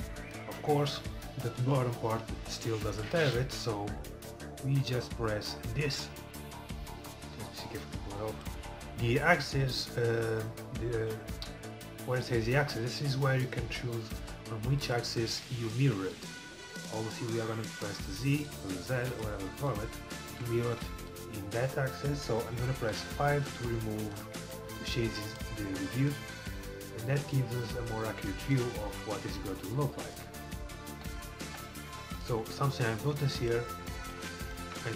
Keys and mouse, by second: 7.8-9.7 drag, 13.1-20.2 drag, 19.5-20.9 middle drag, 20.9 Tab, 23.0 KP_5, 25.1-26.9 drag, 26.9-28.2 middle drag, 28.6 middle click, 30.6 middle click, 31.1 KP_5, 31.5 KP_3, 34.7 Tab.